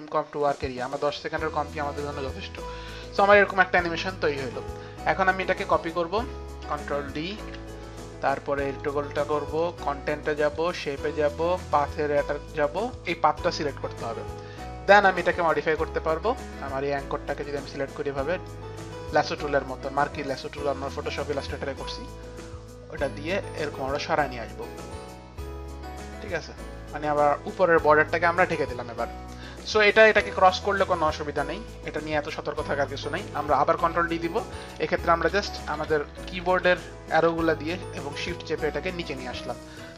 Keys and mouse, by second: 0.9 right click, 0.9 click, 0.9 n, 1.5 click, 5.6 click, 7.4 ctrl+click, 7.4 ctrl+d, 8.8 click, 9.7 ctrl+d, 9.7 click, 10.5 ctrl+d, 10.5 click, 11.4 ctrl+d, 11.4 click, 11.6 click, 11.8 click, 12.4 click, 13.0 click, 14.7 click, 15.1 click, 15.8 click, 17.4 click, 17.6 click, 18.5 click, 22.1 click, 32.2 click, 33.3 click, 33.8 ctrl+d, 35.2 shift+Down, 35.8 shift+Down, 36.7 shift+Down, 37.8 shift+Up, 37.8 shift+Down, 38.3 shift+Up, 38.3 shift+Down.